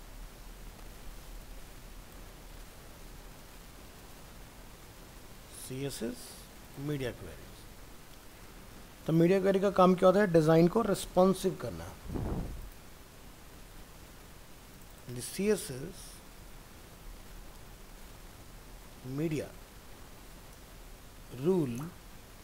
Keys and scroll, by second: 2.6 ctrl+d, 4.1 ctrl+v, 16.1 shift+Right.